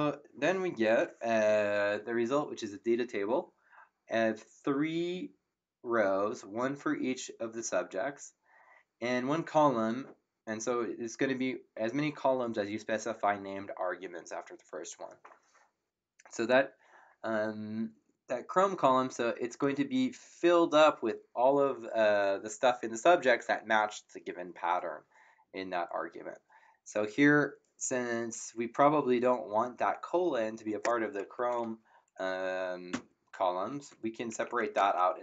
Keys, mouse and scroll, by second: 32.9 Up, 34.3 Left, 34.7-35.2 typing, 35.1 Right.